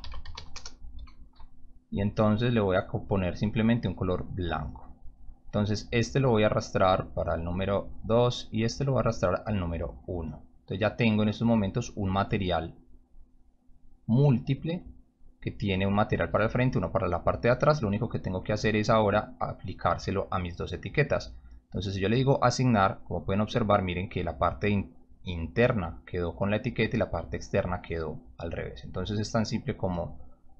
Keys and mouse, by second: 0.0-0.8 typing, 2.8 click, 3.9 click, 4.6 click, 6.0-7.7 drag, 8.6-9.8 drag, 10.8-11.1 drag, 11.6 click, 11.7 click, 12.3-12.9 drag, 13.8 drag, 14.9-15.6 drag, 19.2 ctrl+click, 21.1 right click, 21.8 click, 29.7-30.5 drag.